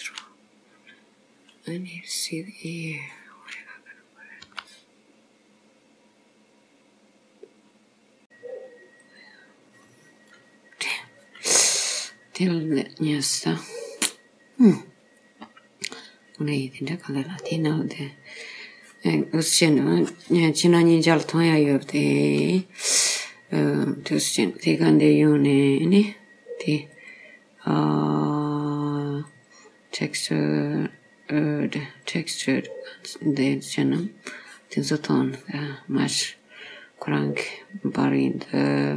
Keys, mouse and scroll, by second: 2.8 click, 4.5 g, 8.2 click, 27.0 click, 31.9 click, 36.2 click.